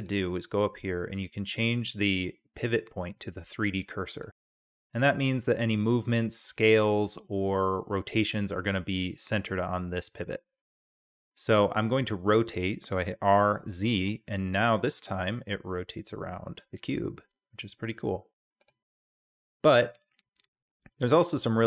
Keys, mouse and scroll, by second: 12.0 r.